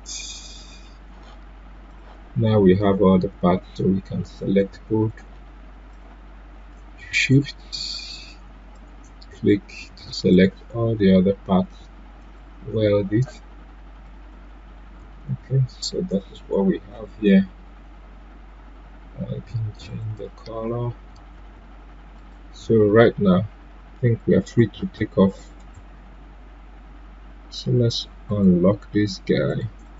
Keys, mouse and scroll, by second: 0.1 right click, 1.8 click, 15.2 ctrl+z, 19.9 ctrl+z, 19.9 click, 21.3 ctrl+z, 22.1 click, 24.5 click, 25.5 right click, 28.2 click.